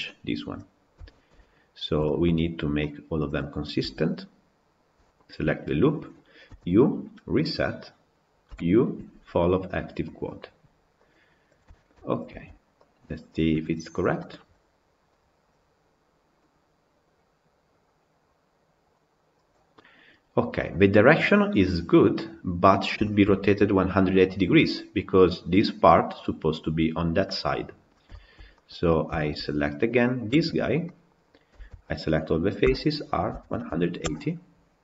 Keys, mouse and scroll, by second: 0.6-1.0 scroll down 4, 1.0-1.4 shift+middle drag, 1.4 scroll down 1, 1.6-1.9 scroll up 1, 1.9 shift+middle drag, 2.1-2.6 scroll up 1, 2.6-3.2 middle drag, 3.2 click, 3.8 Tab, 5.0 alt+click, 7.5 u, 11.2 u, 11.6 shift+middle click, 12.3 Tab, 12.8 Left, 13.4 KP_Decimal, 14.0-18.8 middle drag, 19.6-22.4 middle drag, 22.4-22.9 scroll up 2, 22.9-27.6 shift+middle drag, 27.6-28.9 scroll down 9, 28.0 shift+middle drag, 28.4-28.8 middle drag, 29.0-29.9 shift+middle drag, 29.9 click, 30.3 Tab, 30.7-31.4 middle drag, 31.4 a, 32.6 r.